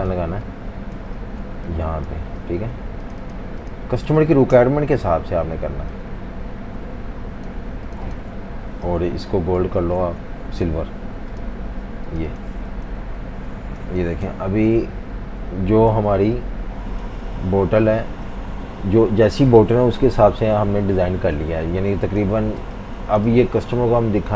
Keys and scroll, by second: 0.0-3.0 typing, 4.5 Delete, 4.8 super+v, 9.6 super+z, 10.7 i, 11.6 v, 13.0 super+0, 13.8 typing, 14.3 super+-, 14.4 super+-, 14.6 super+-, 15.9 typing, 17.3 typing, 18.1 F18, 21.0 typing, 22.4-23.7 typing.